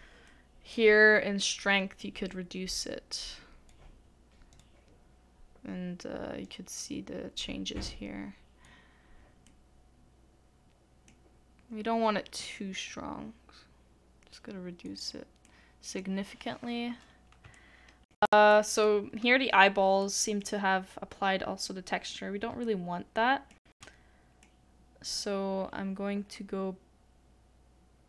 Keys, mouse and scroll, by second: 0.3 middle click, 22.8 shift+middle click.